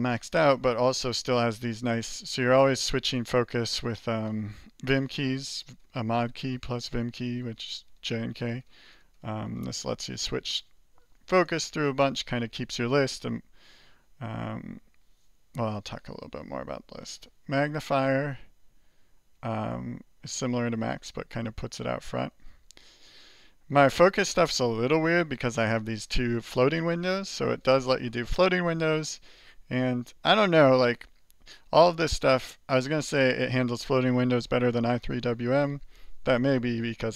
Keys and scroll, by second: 17.0 alt+j, 17.5 alt+j, 19.3 alt+j.